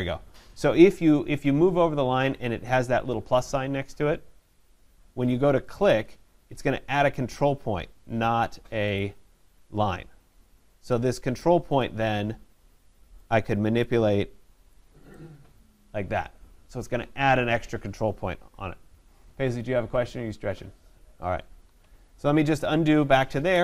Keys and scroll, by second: 19.2 ctrl+z.